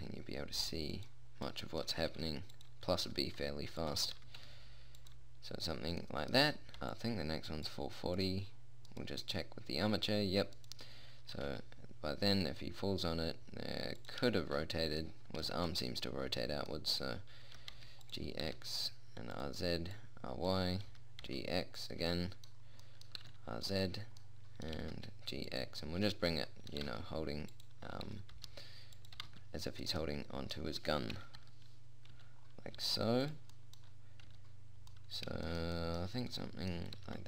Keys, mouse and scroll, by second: 0.2 g, 1.2 click, 2.6 r, 3.5 g, 4.6 g, 7.4-9.4 drag, 9.4 middle click, 11.8 r, 15.5-18.0 middle drag, 18.0 g, 18.9 r, 20.4 click, 21.4 g, 22.2 click, 22.4 middle click, 23.6 r, 25.2 g, 27.3 g, 28.5 r, 29.6 g, 31.6 KP_1, 31.8 KP_3, 32.6 z, 33.2 g, 34.8 z.